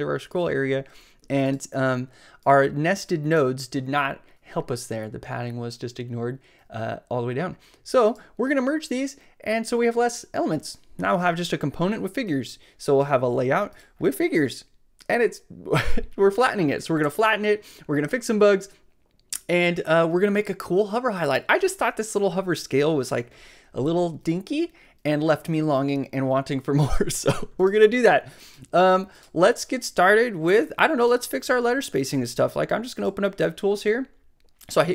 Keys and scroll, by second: 32.4 shift+super+c.